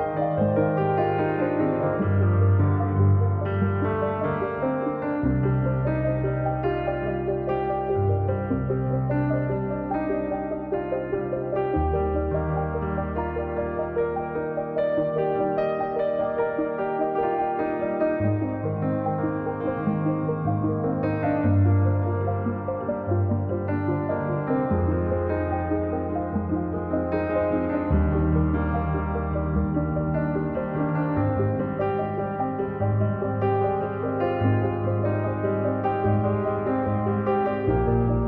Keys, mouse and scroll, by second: 0.4 click, 1.0-2.3 drag, 2.3 ctrl+z, 2.8-6.2 drag, 7.1-8.3 drag, 8.9-10.1 drag, 14.2-15.4 drag, 19.2-20.4 drag, 21.4-23.4 drag, 23.4 scroll down 3, 23.5 middle click, 24.2 scroll up 1, 24.3 middle click, 24.6-27.0 drag, 27.2 middle click, 27.6-28.7 drag, 28.7 middle click, 29.2 click, 29.6 middle click, 30.0 click, 30.4 middle click, 31.2-32.2 drag, 32.2 middle click, 32.8 click, 33.7-34.8 middle drag, 35.6 click, 36.1 click, 36.8 middle click, 37.4 KP_1, 38.2 click.